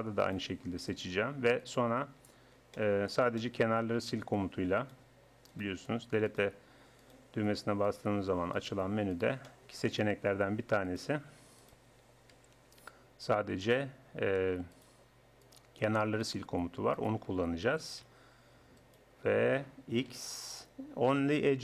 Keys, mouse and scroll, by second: 2.2 middle click, 2.4 right click, 3.2 middle click, 4.8-7.6 middle drag, 7.6-9.5 right drag, 9.5 middle click, 9.7-10.9 drag, 10.9-12.4 middle drag, 12.4 z, 15.5 click, 15.9-17.7 middle drag, 17.7 z, 19.3-20.8 drag, 20.1 x.